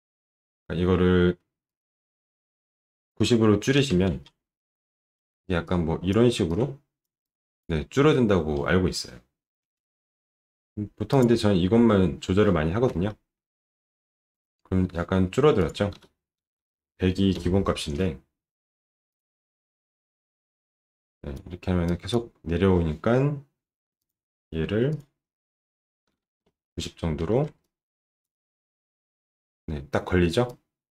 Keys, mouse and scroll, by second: 11.1 click, 13.1 alt+middle click, 14.4 alt+middle click, 15.5 click, 15.9 1, 19.0 click, 20.7 click, 21.1 click, 21.8 click, 24.0 click, 24.9 click, 25.8-27.0 typing, 27.0 Return, 27.2 alt+middle click, 27.6 click, 28.2 alt+middle click, 30.5 click.